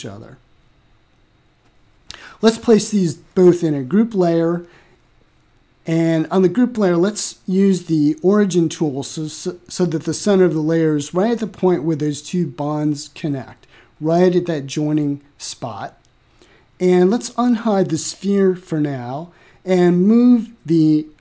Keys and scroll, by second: 19.3 m.